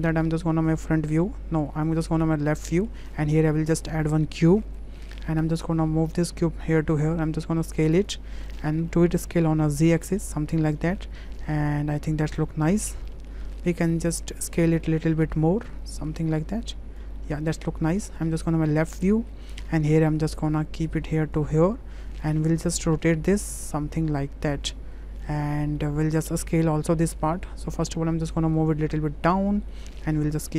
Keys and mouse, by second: 1.3 `, 2.6 shift+middle drag, 3.1 shift+a, 5.8-6.6 drag, 7.0 s, 8.8 s, 11.1-12.1 middle drag, 12.4 click, 13.1 middle click, 13.8 shift+middle click, 14.0 shift+drag, 14.6 click, 15.0 middle click, 15.7-17.0 drag, 17.2 middle drag, 20.1 w, 20.7 click, 21.3 click, 22.9 click, 23.8-25.2 drag, 25.8-27.3 middle drag, 28.0 w, 28.6-29.5 drag, 29.9 middle drag.